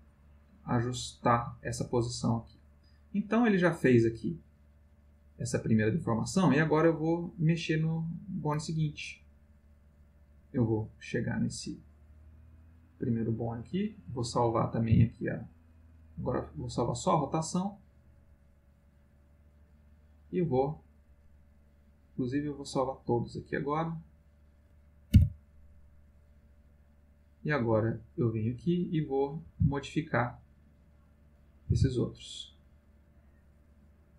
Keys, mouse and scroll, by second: 11.3-12.7 drag, 13.4 click, 14.9 i, 16.3 click, 17.8-19.8 drag, 21.7-23.2 drag, 23.6 click, 25.1 i, 26.1 click, 27.1-28.3 drag, 28.9 click, 29.4 r, 30.6 click, 31.7 r, 32.2 click.